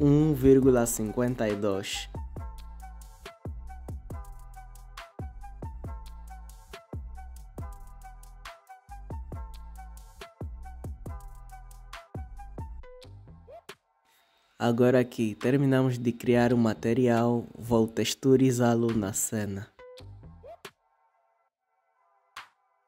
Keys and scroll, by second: 0.3-1.2 typing, 1.6 Return.